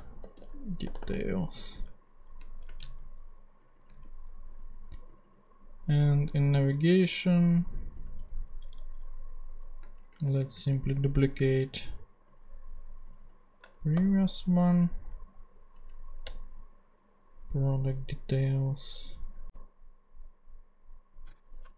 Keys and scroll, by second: 0.0-1.6 typing, 1.9 alt+shift+s, 2.3 alt+shift+Left, 2.5 alt+shift+Right, 2.9 alt+shift+super+c, 3.8 shift+super+c, 3.9 shift+super+v, 8.6 shift+super+Left, 9.6 shift+super+Left, 10.0 shift+super+Down, 11.4 shift+super+Down, 11.5 shift+super+d, 13.7-14.6 typing, 15.7 shift+Down, 16.2 shift+Return, 21.1-21.7 typing.